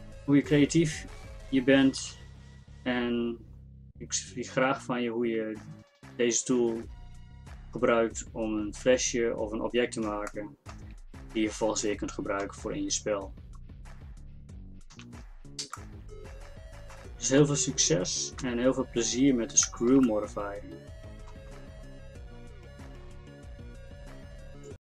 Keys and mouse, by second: 1.1 middle click, 2.0 z, 9.4-15.0 middle drag, 15.0 z, 18.5 KP_5.